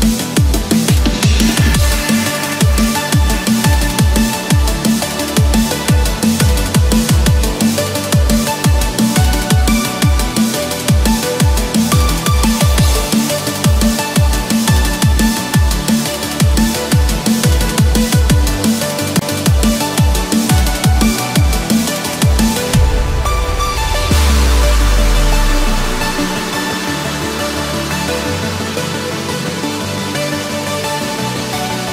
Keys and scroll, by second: 18.5 Escape.